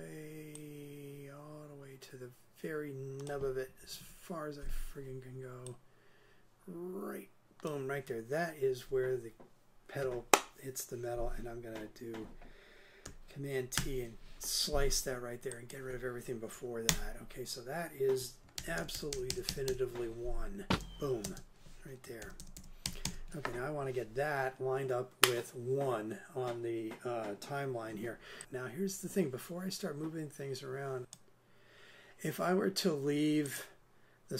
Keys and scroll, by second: 3.8 super+Right, 13.8 super+t, 16.9 BackSpace, 18.6 super+Left, 20.7 super+space, 22.1 super+space, 22.2 super+Left.